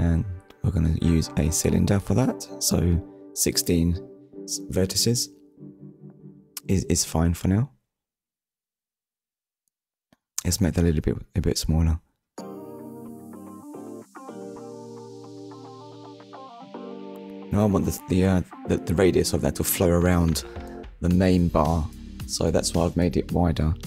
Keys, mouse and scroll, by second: 0.7 scroll down 1, 1.9 click, 2.7 KP_1, 3.2 Return, 4.8 KP_1, 6.5 click, 8.3 click, 13.4 click, 16.7 scroll up 1, 17.8 click, 18.7-19.1 scroll up 1, 20.2 click, 22.3 shift+middle click.